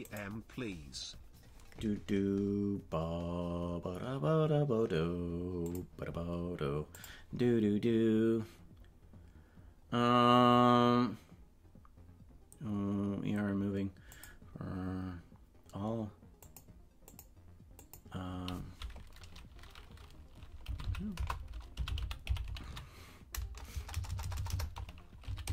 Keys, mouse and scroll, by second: 0.0 right click.